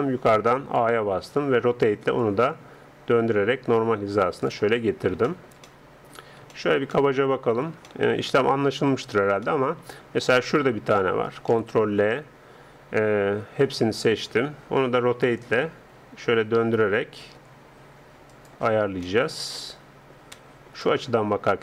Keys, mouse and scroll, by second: 0.8 a, 1.4 r, 5.0-9.1 middle drag, 10.5-12.3 right drag, 11.5 ctrl+l, 13.3 a, 13.7 a, 14.9 r, 19.1 click, 19.5-21.6 middle drag.